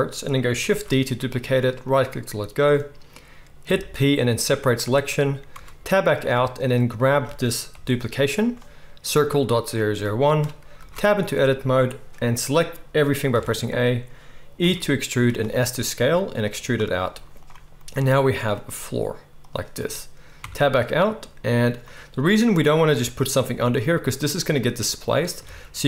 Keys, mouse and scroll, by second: 0.6 shift+d, 1.9 middle click, 3.6 p, 5.5 Tab, 6.6 click, 7.7 g, 10.7 Tab, 13.3 a, 14.6-20.4 middle drag, 14.6 e, 17.0 z, 18.7 s, 20.4 Tab, 24.3 click, 25.4 shift+a.